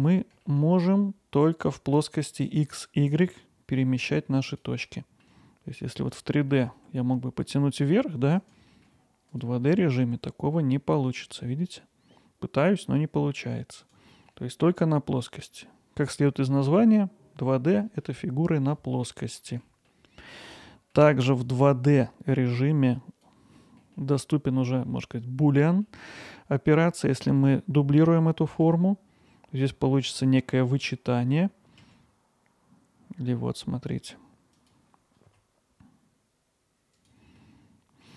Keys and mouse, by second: 0.4 alt+middle click, 4.9 alt+middle click, 5.8 click, 6.2 alt+middle click, 8.7 alt+middle click, 9.3 click, 9.7 alt+middle click, 14.1 alt+middle click, 19.2 middle click, 19.9 alt+middle click, 20.7 middle click, 21.5-23.3 drag, 23.6 middle click, 23.9 alt+middle click, 25.9 middle click, 26.3 alt+middle click, 28.6 shift+d, 34.6 click, 36.9 click, 37.4 middle click.